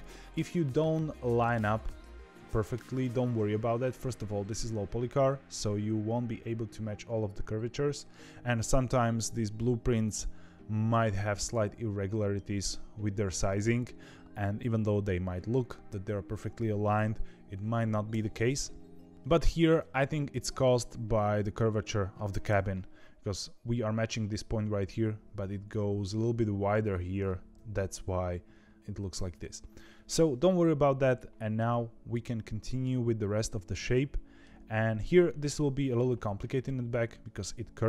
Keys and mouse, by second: 18.0 KP_7, 19.1 shift+KP_1, 22.4 KP_7, 27.5 KP_1, 31.5-32.8 middle drag, 33.9 middle click, 36.1 KP_7, 37.1 shift+middle click.